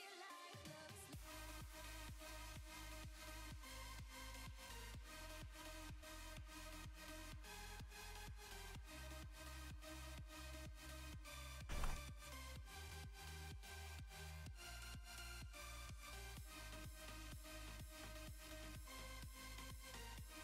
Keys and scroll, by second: 11.7 ctrl+z.